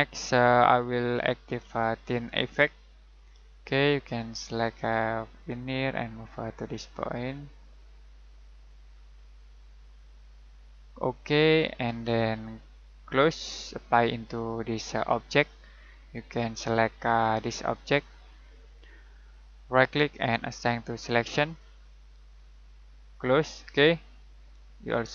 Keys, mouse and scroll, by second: 1.1 click, 16.7 middle click, 18.4 click, 19.7 right click, 20.6 click, 23.1 click, 24.6-25.1 typing.